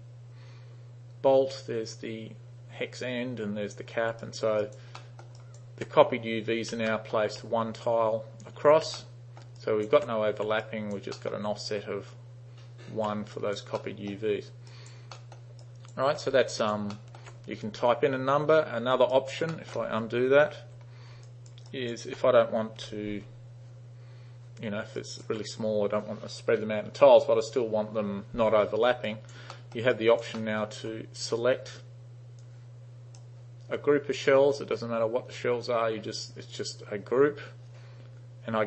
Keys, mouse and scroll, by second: 4.3 alt+right click, 4.7 alt+right click, 5.0 alt+middle click, 5.4 alt+right click, 7.0 alt+middle click, 9.0-9.4 alt+middle drag, 9.6 alt+right click, 10.7 alt+right click, 11.2 alt+middle drag, 13.4 alt+right click, 13.8-14.2 alt+middle drag, 14.8 alt+right click, 15.2 alt+middle click, 15.7 alt+right click, 16.6 alt+right click, 17.0 alt+middle drag, 19.2 alt+right click, 19.6 alt+middle drag, 20.5 ctrl+z, 21.3 alt+click, 21.8 alt+right click, 22.8 u, 25.0 alt+right click, 29.1 alt+right click, 29.6 alt+middle drag, 30.0 alt+right click, 30.4 alt+middle click, 32.4 click.